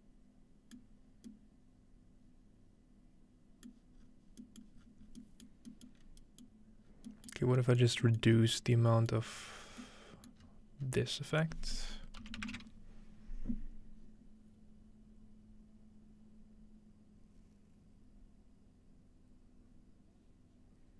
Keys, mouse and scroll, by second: 0.8-1.3 middle drag, 1.1-2.7 scroll down 1, 3.8-4.4 middle drag, 4.0-6.0 scroll down 2, 4.7-5.2 middle drag, 5.5 middle click, 5.9-8.0 middle drag, 6.0 scroll up 2, 7.8 scroll down 2, 8.2 middle click, 8.3-9.2 scroll up 4, 9.1-9.7 middle drag, 9.2-10.4 scroll down 2, 10.4-10.9 scroll up 2, 11.3-12.9 drag.